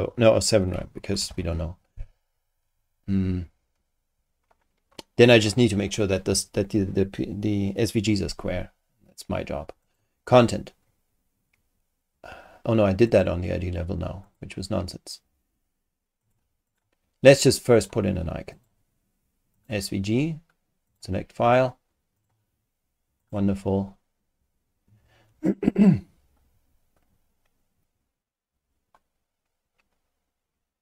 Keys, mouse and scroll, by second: 0.4-1.8 typing, 8.8 scroll up 2, 9.8 click, 13.1 click, 14.2 click, 16.2 click, 16.7 click, 17.7 click, 18.5 click, 19.5 click, 20.9 click, 22.2 click, 23.2 click.